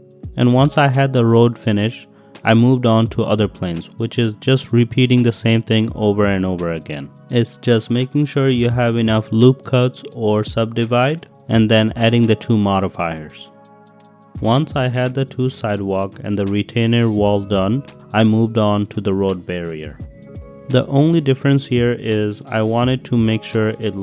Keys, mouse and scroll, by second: 0.8-1.2 middle drag, 1.2 click, 1.7 s, 2.0 middle click, 2.3 a, 2.8-3.4 drag, 3.9 ctrl+r, 4.0 click, 5.1 ctrl+y, 6.0 ctrl+r, 6.2 click, 7.5 alt+d, 7.8 y, 8.8 shift+click, 9.0 middle click, 9.2 drag, 9.6-10.1 drag, 10.7 drag, 11.8 click, 12.3-13.1 drag, 13.3 click, 13.5 click, 14.3 g, 14.5 z, 14.9 click, 16.9 click, 17.3 middle click, 17.8 middle click, 18.2 middle click, 18.4-18.9 middle drag, 19.2 middle click, 19.5 middle click, 20.0 click, 20.3 click, 20.8 ctrl+r, 22.1 ctrl+r, 22.3 click, 23.6 ctrl+r.